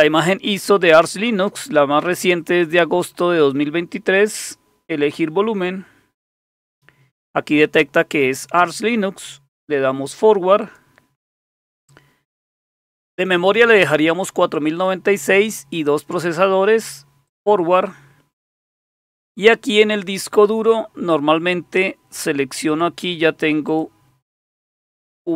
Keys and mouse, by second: 5.0 click, 10.6 click, 17.2 click, 22.7 click, 23.7 click, 25.0 click.